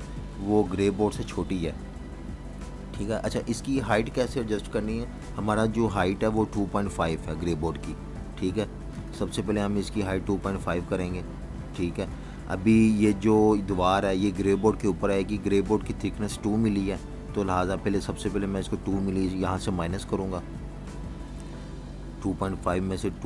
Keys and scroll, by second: 0.0 v, 0.1 space, 2.4 v, 2.6 space, 3.5 v, 3.7 space, 12.1-13.2 typing, 22.5 -.